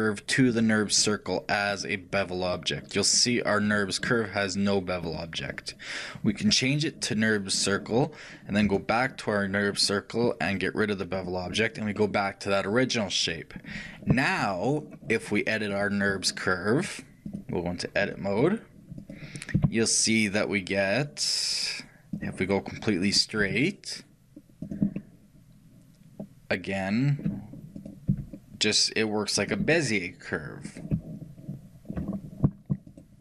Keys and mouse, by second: 0.6-3.6 drag, 5.1-6.7 middle drag, 6.7 click, 11.2-13.1 drag, 12.0-14.0 middle drag, 15.8-19.3 drag, 19.2-22.2 right drag, 25.0-27.0 middle drag, 29.8-33.2 middle drag.